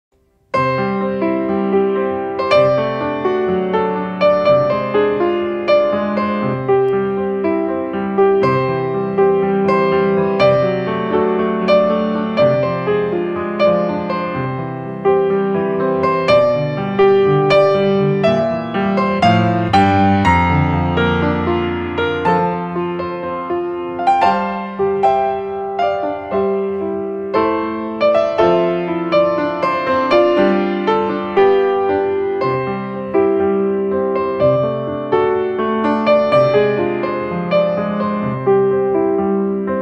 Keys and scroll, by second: 2.7 space, 16.3 ctrl+space.